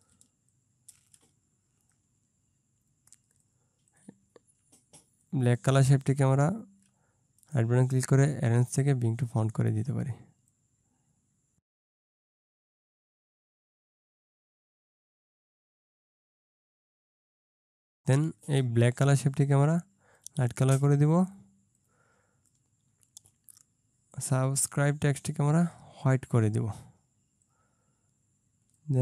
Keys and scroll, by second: 12.0 ctrl+space, 13.3 ctrl+space, 13.8 ctrl+z, 13.8 ctrl+2, 14.7 ctrl+shift+2, 15.1 ctrl+shift+2, 16.3 Down, 16.8 ctrl+space, 17.8 ctrl+space, 18.0 ctrl+z.